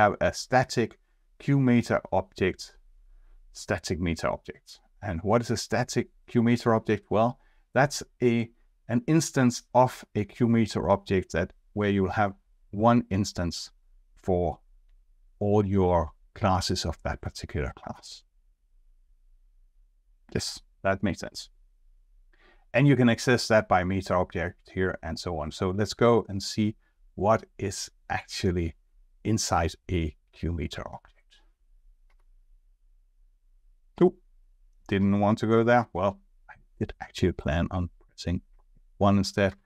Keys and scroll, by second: 32.1 F2, 34.9 F2, 38.9 F1.